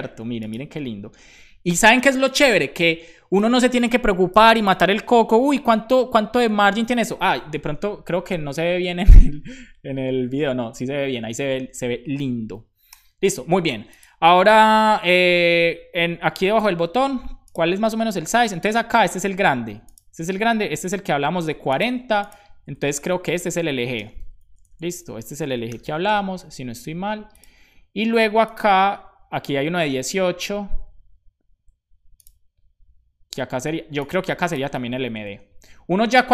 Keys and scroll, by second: 23.6 super+Right, 23.9 Return, 24.1 super+v, 24.5 Left, 24.7 Left, 24.8 Left, 26.1 super+s.